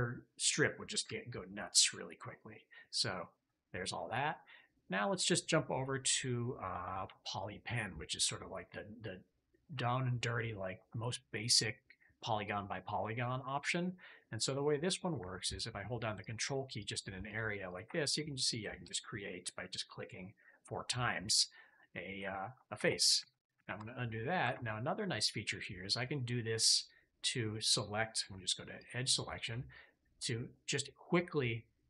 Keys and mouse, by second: 3.3 middle click, 7.0 alt+q, 14.6 middle click, 16.1 ctrl+click, 16.7 ctrl+click, 17.2 ctrl+click, 17.6 ctrl+click, 21.8 click, 22.7 ctrl+z, 23.1 ctrl+z, 23.5 ctrl+z, 24.0 middle click, 24.4 ctrl+z, 25.9 click, 26.7 click, 28.3 2, 28.7 click.